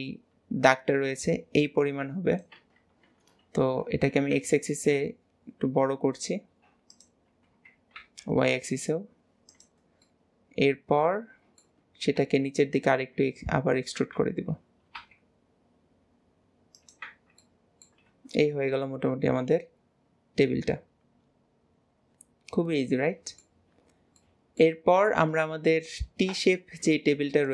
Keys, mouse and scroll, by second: 10.1-12.2 middle drag, 12.2 KP_1, 17.4-18.1 middle drag, 18.1 alt+z, 18.5 middle drag, 18.9-21.6 middle drag, 23.7-24.2 scroll down 3, 24.2-27.5 middle drag.